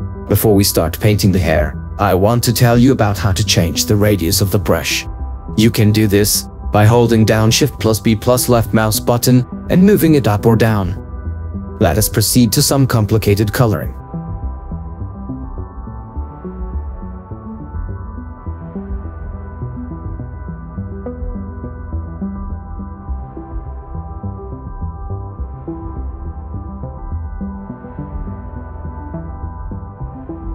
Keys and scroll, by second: 1.2 shift+b, 1.7 shift+b, 11.7 ctrl+z.